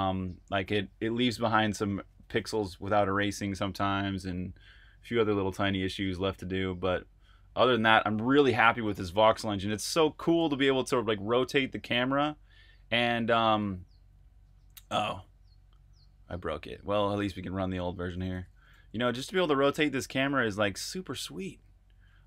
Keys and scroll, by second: 10.2 super+r, 10.4-11.3 typing, 16.7-22.2 typing.